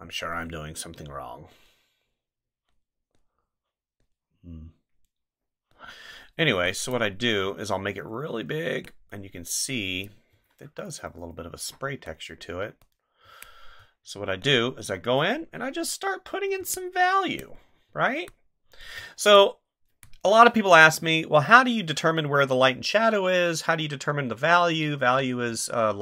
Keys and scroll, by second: 7.4 ctrl+z, 10.3 ctrl+z, 13.2 space, 16.6 space.